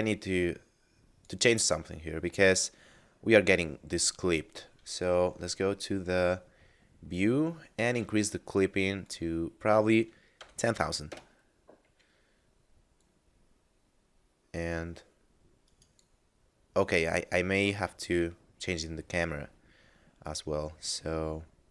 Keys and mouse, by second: 0.0 click, 4.3 middle click, 7.8 click, 10.4 0, 11.0 Return, 13.0 click, 15.6 click, 15.6 right click, 16.8 right click, 19.7 middle click.